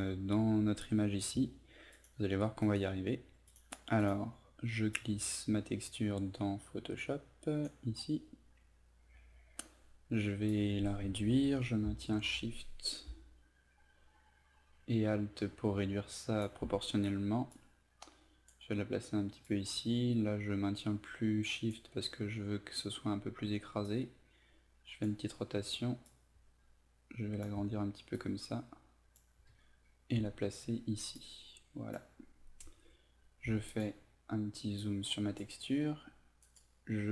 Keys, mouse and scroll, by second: 2.7 right click, 3.5-27.5 drag, 28.2-29.2 ctrl+drag, 31.2 click, 33.5 ctrl+z, 33.8-36.3 drag, 36.5 right click.